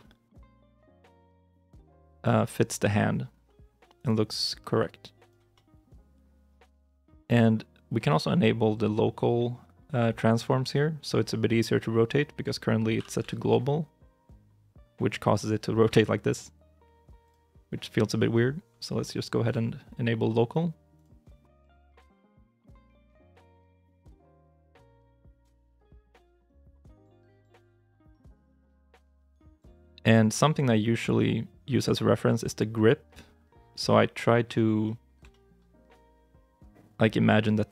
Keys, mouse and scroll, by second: 0.7 ctrl+z, 1.1 middle click, 1.6 shift+middle click, 3.2 r, 4.6 g, 5.4 middle click, 6.3-8.3 scroll down 1, 12.8 r, 13.1 z, 22.9 r, 25.1 middle click, 25.5 g, 27.2 middle click, 27.9 shift+middle click, 28.2-28.6 scroll up 1, 34.7 middle click, 35.2 shift+middle click.